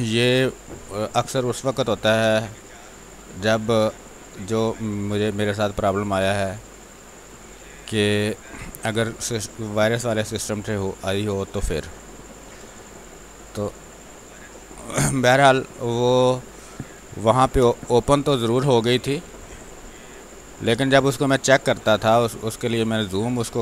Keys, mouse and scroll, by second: 0.5 space, 1.4-7.4 drag, 7.4 x, 7.6 click, 8.3 space, 8.5 click, 9.0 x, 9.6-13.2 drag, 13.2 space, 15.2 space, 16.0 click, 16.3-18.0 typing, 16.8 click, 17.7 click, 19.5-21.9 drag, 21.9 space, 22.1 click, 22.4 space, 23.2-23.6 drag.